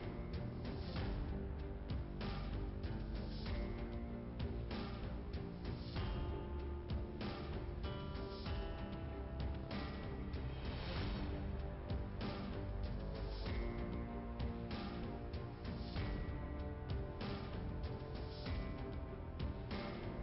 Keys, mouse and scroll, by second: 1.1 click, 1.5 click, 1.6 double click, 2.0 double click, 2.1 double click, 3.6 click, 5.1 click, 6.5 click, 7.7 click, 9.8 click, 10.8 click, 11.4-12.6 typing, 11.7 click, 13.1 Return, 13.4 Return, 15.2 click, 15.9-16.7 typing, 16.0 click, 17.0 Return, 18.9 click, 19.8 click.